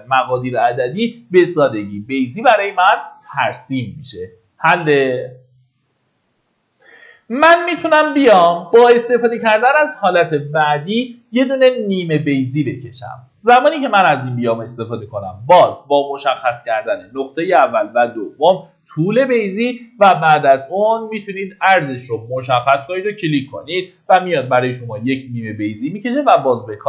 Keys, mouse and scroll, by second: 1.3-2.5 middle drag, 13.0 click.